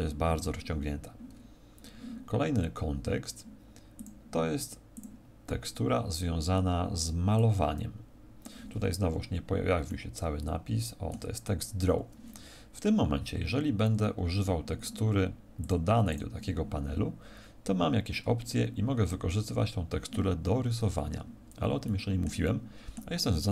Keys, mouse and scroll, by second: 21.0 Escape, 21.8 middle click, 22.4 middle click, 23.3 middle click.